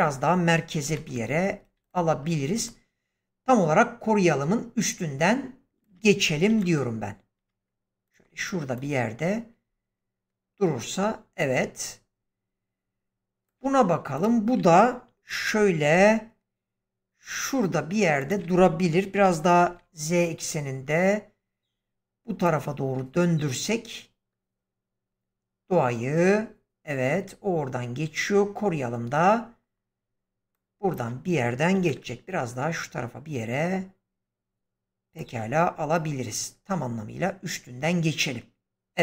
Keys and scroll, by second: 0.7 g, 6.4 g, 15.8 g, 19.0-19.6 typing, 22.1 typing, 31.7 g.